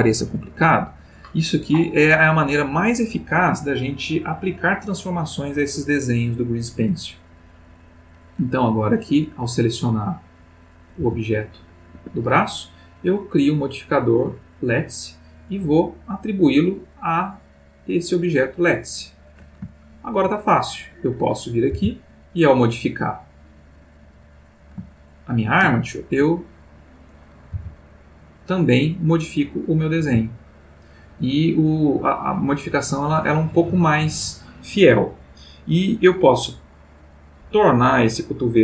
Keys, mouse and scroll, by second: 7.8 click, 9.6 click, 11.0 g, 11.9 Escape, 12.9 click, 14.5 click, 16.1 click, 18.1 click, 19.7-20.4 ctrl+middle drag, 20.9 click, 21.8 r, 24.4 click, 25.1-26.4 shift+middle drag, 26.9 click, 27.6 r, 29.4 click, 29.8 click, 30.0 r.